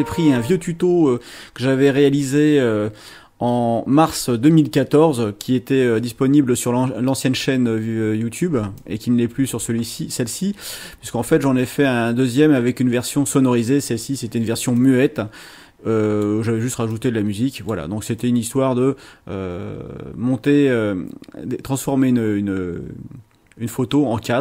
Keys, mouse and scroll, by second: 8.8 click, 14.8-16.4 drag, 16.9-17.9 drag, 18.2-24.4 drag.